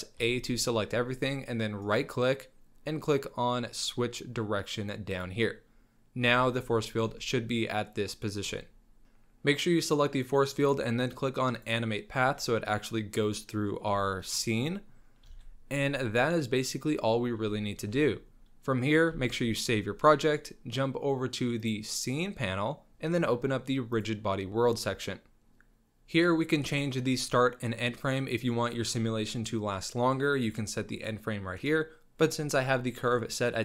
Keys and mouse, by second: 0.5 a, 2.0-5.6 drag, 6.6 Tab, 6.8 shift+middle click, 8.5-9.0 middle drag, 14.1 shift+middle drag, 14.6 middle drag, 15.3 ctrl+s, 15.7-17.2 middle drag, 17.6 shift+middle drag, 18.3 c, 19.1 ctrl+s.